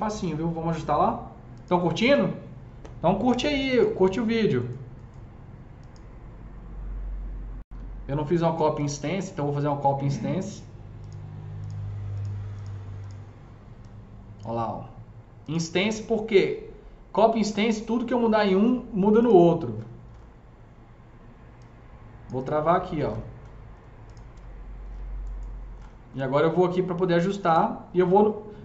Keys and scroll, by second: 3.6-4.5 typing, 7.7 Delete, 24.3 F3.